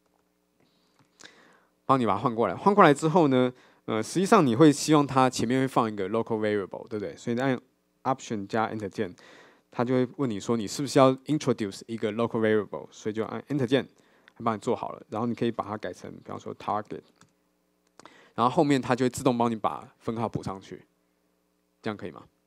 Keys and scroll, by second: 8.9 alt+Return.